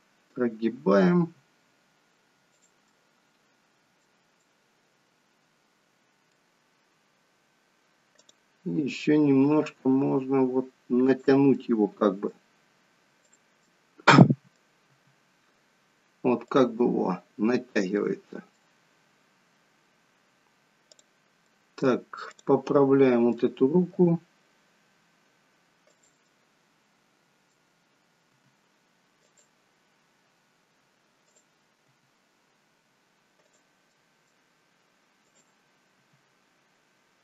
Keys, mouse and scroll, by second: 1.2 r, 2.8 middle click, 4.4 middle click, 8.1 click, 9.4 r, 11.5 middle click, 13.2 click, 13.6 middle click, 14.9 r, 16.8 middle click, 20.9 click, 21.5 middle click, 22.3 click, 22.7 middle click, 23.8 r, 26.2 middle click, 28.3 r, 31.2 click, 31.8 r, 33.9 middle click, 35.2 click, 35.9 r.